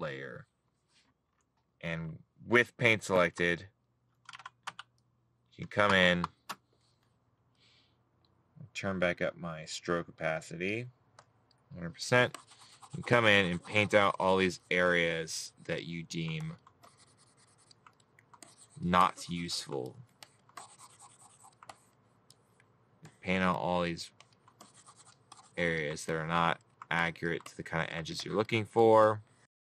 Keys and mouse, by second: 19.3 middle click, 21.1 middle click, 23.6 middle click, 24.8 middle click.